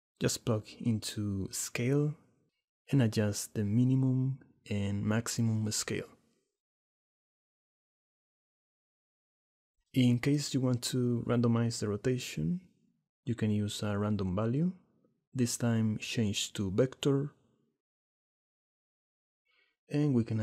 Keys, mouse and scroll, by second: 1.2 click, 2.3 click, 3.4 click, 5.6 shift+middle click, 6.3 shift+click, 6.5 shift+click, 7.3 shift+click, 8.2 shift+middle click, 9.3 click, 15.4 shift+d, 16.9-18.1 drag, 19.1-20.1 drag.